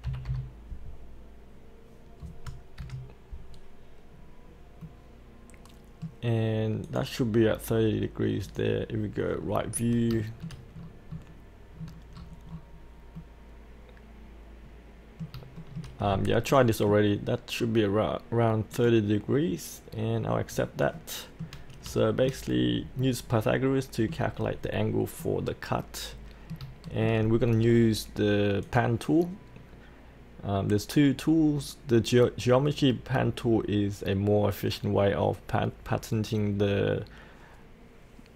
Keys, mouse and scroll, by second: 0.1 KP_6, 0.2 KP_5, 2.8 KP_5, 4.1 scroll up 1, 4.8-6.3 middle drag, 6.8 click, 9.3-10.1 scroll down 1, 10.2 shift+middle click, 10.7-11.8 scroll down 1, 12.1 scroll up 1, 13.1-15.3 middle drag, 15.6 shift+middle click, 16.0-16.5 scroll up 1, 16.5 middle click, 17.6-18.7 scroll down 1, 18.7 click, 19.9-20.9 scroll up 1, 20.9 middle click, 22.0 shift+middle click, 22.5-23.0 scroll down 1, 23.0 middle click, 24.4-25.2 scroll down 1, 25.2-26.6 middle drag, 28.6 click.